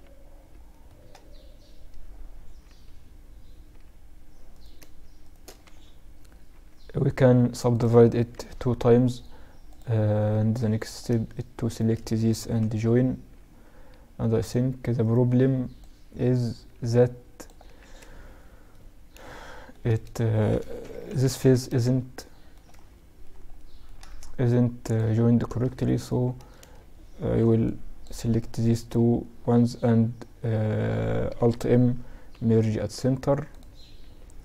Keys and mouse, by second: 3.6-6.2 right drag, 5.6 w, 7.5 t, 8.8-12.4 drag, 9.3 t, 10.0-11.7 right drag, 11.7 j, 12.4 middle click, 13.5-16.8 drag, 14.1-16.6 right drag, 16.8 ctrl+z, 17.8-22.1 middle drag, 20.2 KP_Add, 20.5 KP_Add, 23.6 middle click, 24.0-26.5 drag, 24.2-26.5 typing, 29.0 w, 31.7 alt+m, 33.3 z, 33.6 z, 34.2 a.